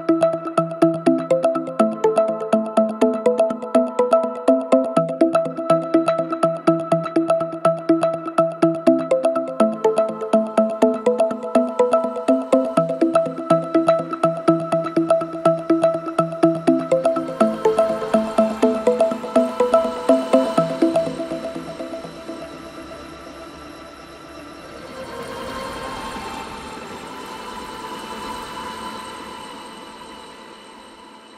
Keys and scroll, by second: 0.4 ., 4.5 3, 12.6 4, 16.3 F9, 19.3 F3, 22.4 3, 29.1 4.